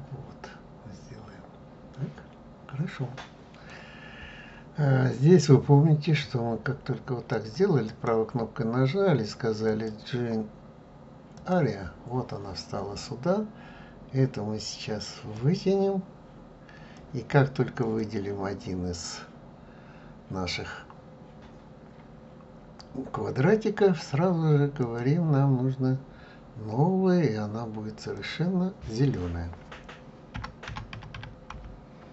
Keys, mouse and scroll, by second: 10.0 right click, 15.8-17.9 drag, 24.9-32.1 drag.